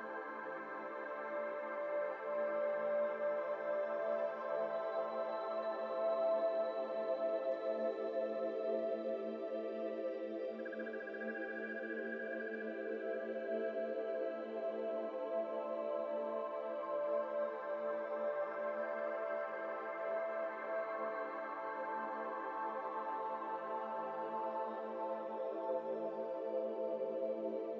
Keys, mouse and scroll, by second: 0.4 KP_1, 1.3 alt+z, 1.6 shift+middle click, 1.7 scroll up 2, 2.0 z, 2.8 g, 6.4 middle click, 6.9 alt+z, 7.0 middle click, 7.6 i, 10.1 g, 11.4 Tab, 11.5-12.1 middle drag, 12.1 Tab, 12.5 middle click, 12.7-13.8 scroll up 2, 13.8 i, 15.8 KP_7, 17.6 middle click, 18.1 e, 20.0-21.9 drag, 21.9 middle click, 22.9 i, 25.5-27.7 drag.